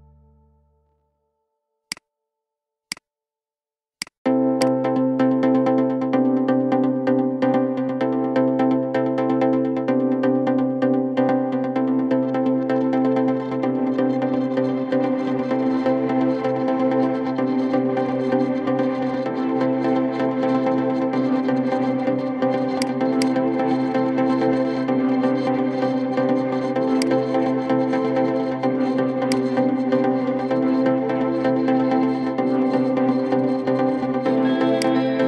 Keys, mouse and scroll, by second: 0.3-1.6 shift+middle drag, 1.6 click, 2.6-4.4 drag, 4.8 scroll down 5, 5.2 shift+middle click, 5.8-6.1 scroll up 3, 6.8-11.2 middle drag, 11.2 scroll down 3, 11.7-12.3 shift+middle drag, 12.3 scroll up 3, 12.8-14.5 middle drag, 14.5 scroll up 1, 17.4 scroll down 3, 17.8-18.9 middle drag, 18.9 scroll up 3, 19.4 KP_7, 20.5 scroll down 3, 22.5-26.0 drag, 29.2 click, 34.5 click.